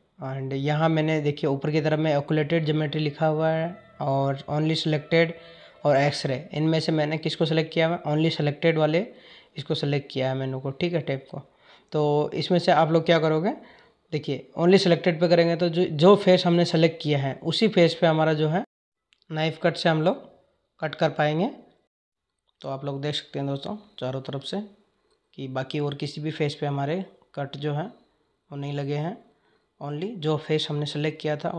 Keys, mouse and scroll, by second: 20.6-22.1 drag.